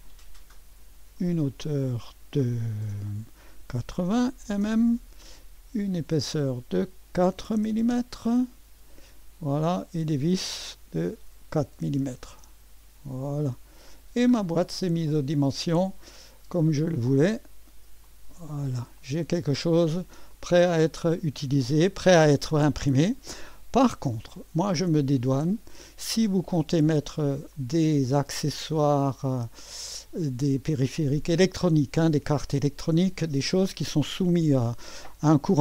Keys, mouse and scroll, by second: 1.2 click, 3.6-4.9 typing, 6.2-7.9 typing, 6.3 click, 9.6 click, 11.0-12.3 typing, 14.7 click, 14.9-16.0 typing, 15.7-18.0 scroll up 1, 18.0 click, 19.0 click, 19.3-20.0 typing, 19.8-20.2 scroll down 1, 20.2-22.9 middle drag, 23.4 click, 24.2-24.9 typing, 24.4 middle click, 24.8-26.2 drag, 26.2 middle click, 27.0 right click, 27.5-31.2 middle drag, 31.2-35.6 drag.